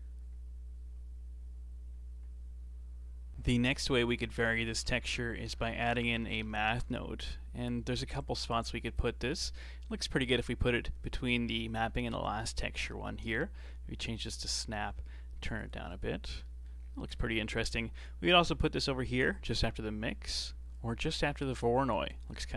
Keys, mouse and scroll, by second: 1.7 middle click, 2.4 middle click, 3.3 middle click, 3.9 middle click, 4.4 shift+a, 6.0 BackSpace, 9.2-9.5 scroll up 3, 9.5-9.9 middle drag, 9.9-10.3 scroll up 2, 10.3-12.7 middle drag, 12.7-16.1 drag, 16.4 middle click, 16.8-17.1 scroll down 4, 17.1-18.5 middle drag, 18.5-19.9 alt+drag, 19.9-20.7 middle drag, 20.7 alt+click, 21.6-21.9 scroll up 4, 21.9 middle click, 22.3 scroll up 1.